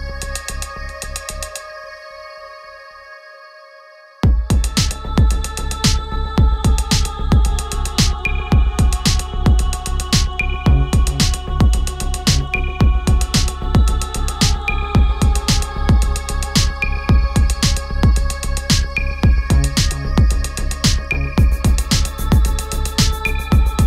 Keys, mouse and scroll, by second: 8.1 click, 12.1 shift+Left, 17.9 Down, 22.3 click.